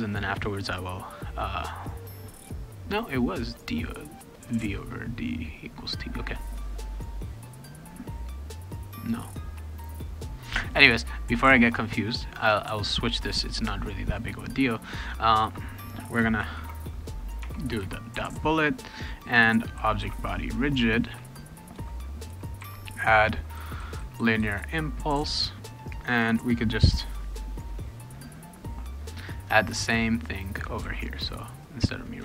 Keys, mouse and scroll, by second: 14.9 click, 15.4 Return, 16.5 shift+-, 17.4 Tab, 17.8 ., 19.5-20.5 typing, 21.7 Return, 22.3 ., 22.6 a, 29.1 click, 29.5-30.6 drag, 30.8 ctrl+c, 31.1-32.2 drag.